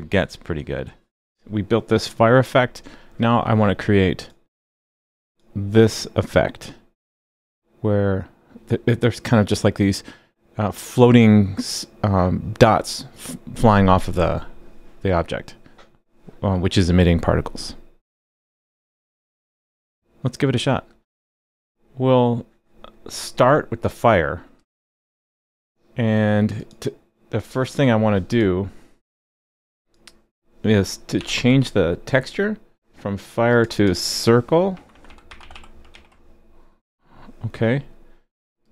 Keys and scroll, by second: 31.2 super+b, 35.9 super+s.